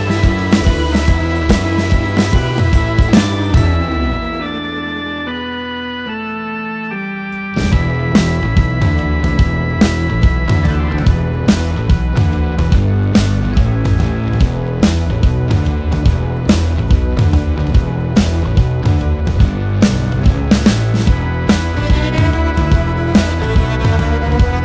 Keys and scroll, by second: 3.4 ., 4.2 5, 4.8 BackSpace, 6.7 7, 7.3 0, 7.5 Return, 14.6 space.